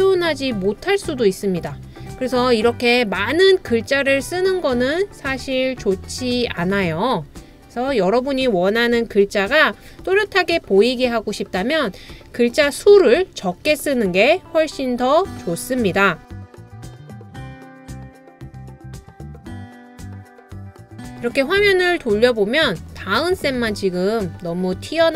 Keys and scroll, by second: 16.5 super+a, 16.6-18.2 typing.